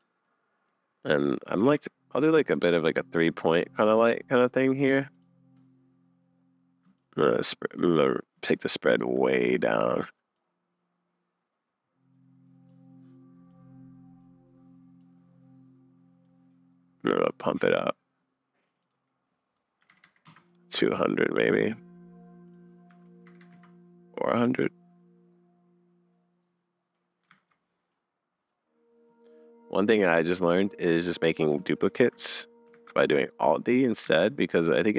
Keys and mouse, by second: 0.2 click, 1.6 g, 2.8-4.0 drag, 7.1-9.1 shift+middle drag, 13.6-15.0 drag, 16.3-17.7 drag, 18.8-20.3 drag, 20.0 0, 22.5-23.5 drag, 23.4 0, 27.4 super+s, 30.1 click, 31.0 click, 31.8 alt+shift+d, 32.7 alt+d.